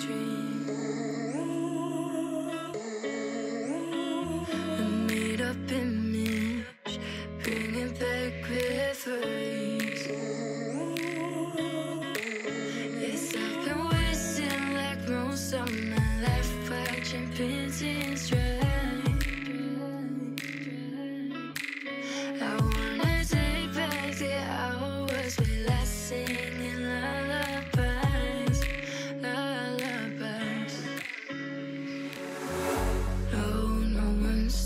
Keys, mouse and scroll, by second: 0.0-2.0 typing, 0.5 click, 3.8 s, 6.0 click, 6.8 s, 7.5 g, 10.0 click, 10.4 g, 11.2-12.7 shift+middle drag, 12.7 click, 13.4 s, 14.4 g, 15.5 s, 16.2-16.8 scroll down 3, 16.8-19.1 shift+middle drag, 19.1 KP_7, 19.8 KP_1, 20.3 KP_3, 21.1 scroll down 3, 21.4 shift+middle click, 22.0 ctrl+l, 22.8-23.2 scroll up 1, 23.2-23.5 shift+middle drag, 23.5 scroll up 1, 24.5 shift+d, 27.6-28.4 middle drag, 28.4-29.3 scroll down 2, 29.3 alt+z, 29.4 click, 29.6 middle click, 30.3 scroll up 2, 30.5-31.1 middle drag, 31.1 scroll down 2, 31.4 middle click, 32.0 scroll down 2, 32.2-33.8 middle drag.